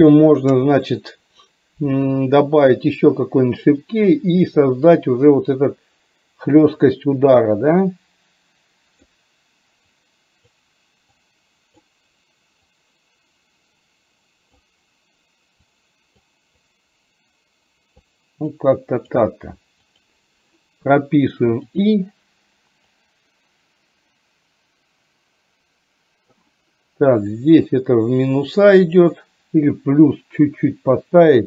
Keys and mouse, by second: 2.9 click, 4.3 click, 6.9-9.2 drag, 10.0 click, 11.2 click, 12.8-14.6 drag, 15.7 click, 16.7-18.1 drag, 18.6 click, 21.7 click, 23.0-26.4 drag, 27.3-31.4 drag.